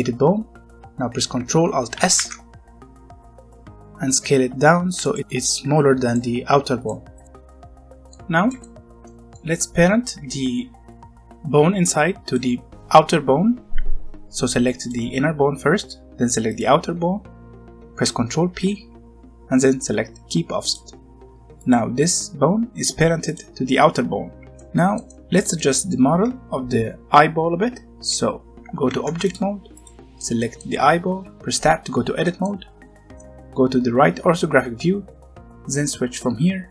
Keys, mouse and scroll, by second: 1.9 ctrl+alt+s, 4.9 click, 5.9-6.3 scroll up 1, 6.3 middle click.